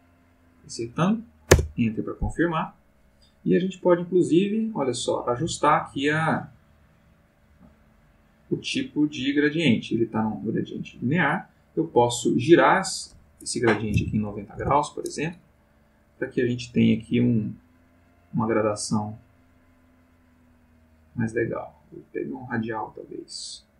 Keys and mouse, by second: 1.5 Return, 3.8-10.0 drag, 12.8 click, 13.8 9, 16.3-20.8 drag, 21.1-22.6 drag.